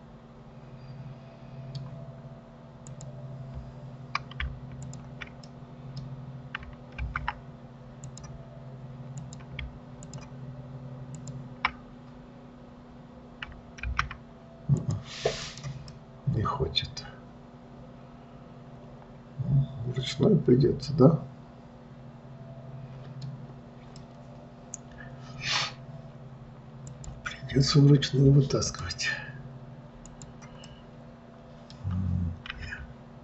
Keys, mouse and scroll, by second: 3.2 click, 5.1 shift+click, 5.8-7.4 middle drag, 7.4 alt+v, 8.4 click, 9.5 click, 10.4 shift+click, 11.5 shift+click, 14.2 alt+v, 15.2 click, 15.8 click, 16.3-19.3 middle drag, 24.4-27.2 middle drag, 27.2 click, 29.0-30.5 drag, 31.0-32.9 middle drag, 32.9 e.